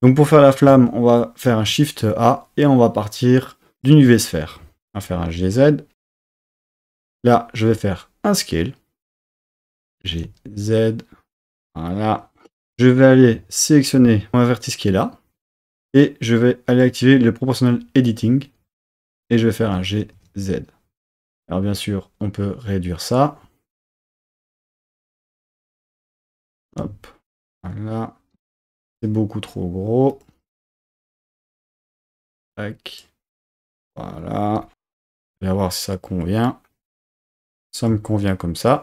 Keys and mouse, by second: 1.5 shift+a, 5.0 g, 5.4 z, 7.1 click, 7.7 s, 9.4 click, 9.9 g, 10.3 z, 11.6 drag, 12.5 Tab, 14.2 1, 16.7 click, 19.6 g, 20.1 z, 26.5 click, 28.3 Tab, 28.7 s, 30.1 click, 30.9 g, 32.3 y, 32.9 click.